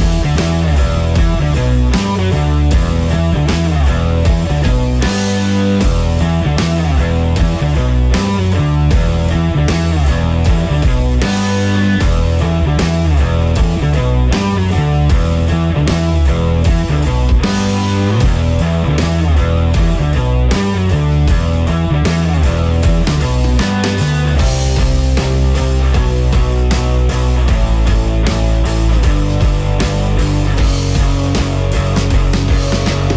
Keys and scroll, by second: 2.5 Delete, 7.0 ctrl+v, 32.9 e.